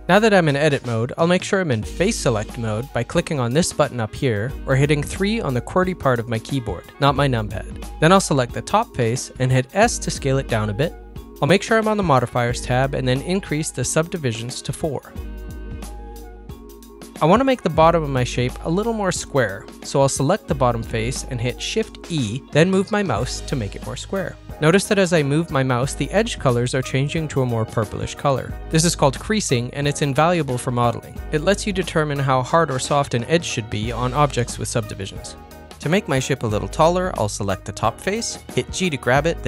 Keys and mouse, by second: 0.0 Tab, 1.7 middle click, 3.3 middle click, 3.7 3, 8.0 click, 8.5 s, 9.9-11.9 middle drag, 12.1 click, 12.7 middle click, 16.0 click, 16.8 middle click, 21.0 shift+e, 25.4-27.0 middle drag, 28.0 middle click, 28.6 g.